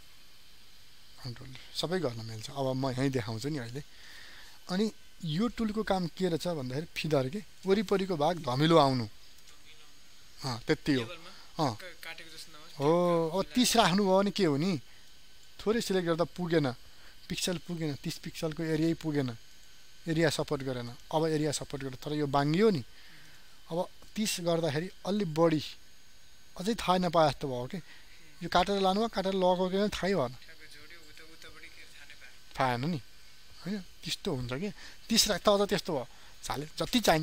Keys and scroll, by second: 1.1 ctrl+d.